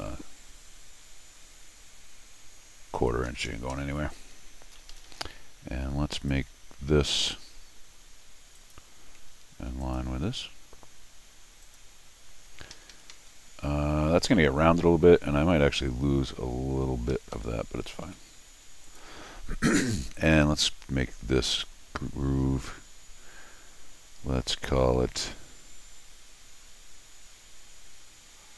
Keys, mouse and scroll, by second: 4.9 Escape, 5.1 Escape, 6.1 click, 8.6 click, 9.8 ctrl+click, 11.6 click, 12.7 Escape, 12.9 Escape, 13.1 Escape, 17.1 Escape, 17.3 Escape, 18.0 d, 18.8 click, 20.1 click, 21.5 click.